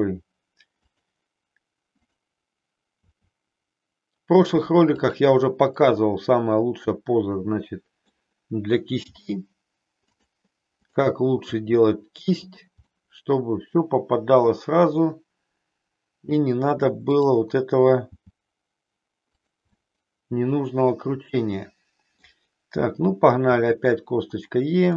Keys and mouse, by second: 1.9 click, 3.0 e, 5.9-8.1 middle drag, 9.1 g, 10.2 click, 10.8 click, 11.5 g, 12.5 click, 12.9-16.4 middle drag, 18.1 g, 19.4 click, 19.8-22.2 middle drag, 23.5 e.